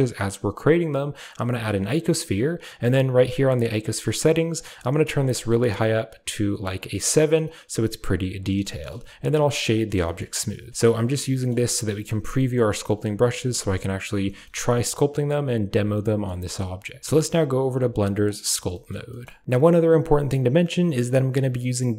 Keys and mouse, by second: 4.5 click, 4.7 click, 4.9 click, 5.2 click, 6.1 click, 8.5 shift+middle drag, 8.9 w, 9.9 shift+middle drag, 11.0-11.4 middle drag, 12.4 middle drag, 14.4 shift+middle click, 15.6-16.2 middle drag, 17.6 click, 18.6 shift+middle click, 19.0 shift+middle click, 19.4 click.